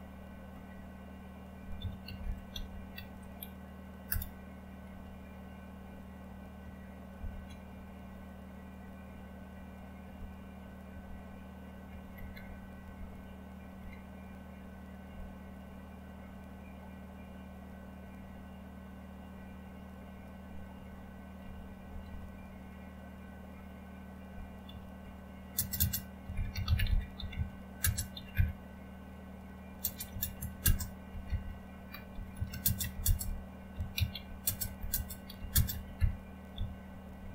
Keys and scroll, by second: 0.0-0.1 typing, 1.5-5.4 typing, 6.9-7.6 typing, 9.1-12.4 typing, 12.5 Down, 12.8 Down, 13.5-14.2 typing, 21.8 Up, 22.0 Up, 22.2 Up, 24.7-37.3 typing.